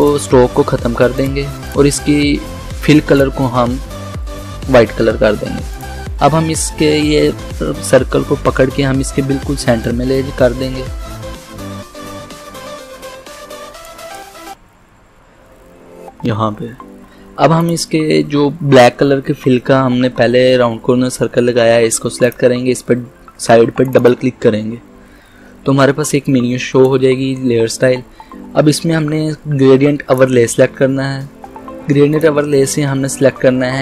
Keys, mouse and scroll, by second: 0.1-14.6 drag, 14.6 Left, 17.7 click, 22.3-29.2 drag, 30.2 click.